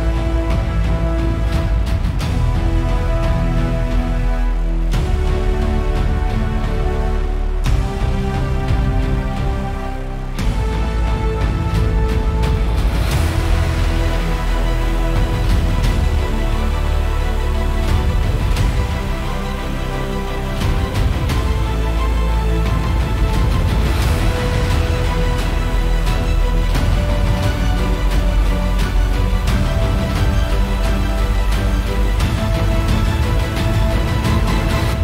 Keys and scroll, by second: 27.3 super+=, 32.0 super+=.